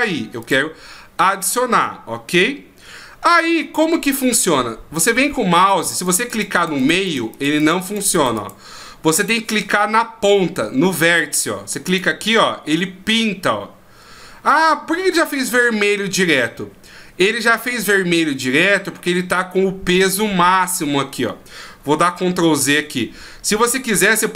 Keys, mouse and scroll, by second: 3.2-5.9 scroll up 2, 5.9 click, 6.3 click, 6.5 click, 6.8 click, 7.0 click, 7.3 click, 7.5 click, 7.8 click, 8.1 click, 8.3 click, 8.9-11.6 scroll up 1, 11.8 click, 22.7 ctrl+z.